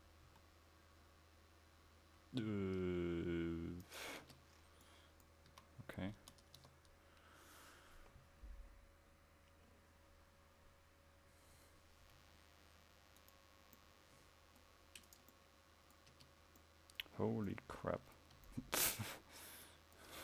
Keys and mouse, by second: 4.3 Tab, 5.6 a, 6.3 Tab, 6.8 Tab, 15.7-16.2 middle drag, 16.2 Tab.